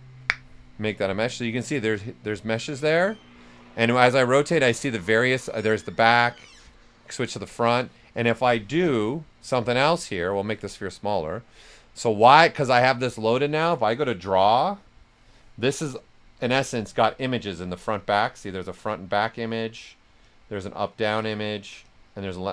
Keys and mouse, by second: 0.7-4.5 right drag, 4.5 right click, 5.8 right click, 8.8 w, 9.4 click, 10.4 q, 10.7-13.6 right drag, 14.1-17.5 drag, 14.1 typing, 19.6 click.